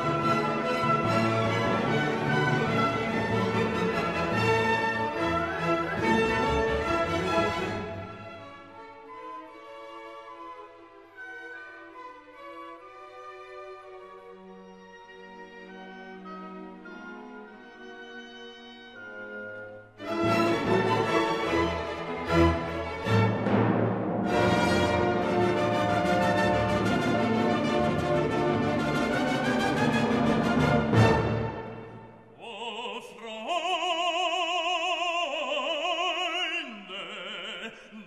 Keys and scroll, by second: 9.4 ctrl+e, 24.0 ctrl+t.